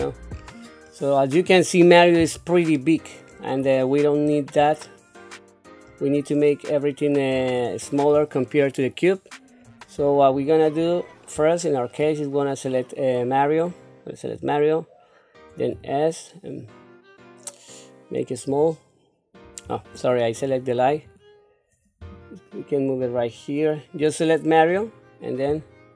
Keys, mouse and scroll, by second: 0.3-2.3 scroll up 3, 2.7 shift+middle click, 3.6-4.2 scroll up 2, 4.2-4.6 scroll down 2, 4.8 shift+middle click, 6.1-6.7 scroll down 1, 6.7-7.3 scroll down 2, 7.3-9.6 scroll up 4, 9.6-9.9 scroll down 1, 10.2 shift+middle click, 10.3-10.7 shift+scroll down 1, 11.0-11.3 scroll down 1, 11.6 shift+middle click, 13.6 click, 15.7 s, 19.7 ctrl+z, 20.4 click, 20.9 click, 22.0 g, 24.0 click, 25.5 s.